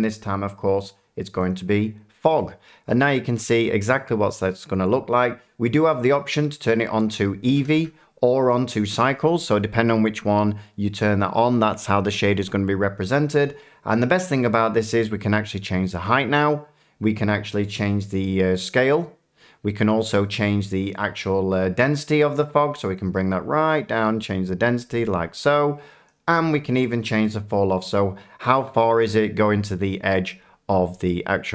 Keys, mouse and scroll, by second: 1.5 click, 3.0 middle click, 4.2 shift+middle click, 6.1 click, 7.5 a, 7.7-8.2 drag, 7.7 a, 17.5 click, 19.4 click, 22.4-29.5 drag.